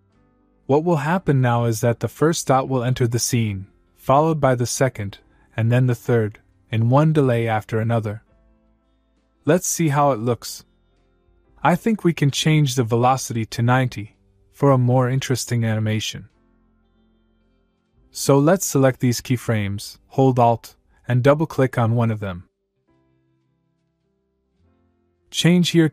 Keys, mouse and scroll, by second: 0.1-8.8 click, 9.0 space, 11.8 space, 11.9-12.6 click, 12.5 space, 14.9 space, 17.4-18.8 click, 23.2 alt+Num_Lock, 24.1 alt+click.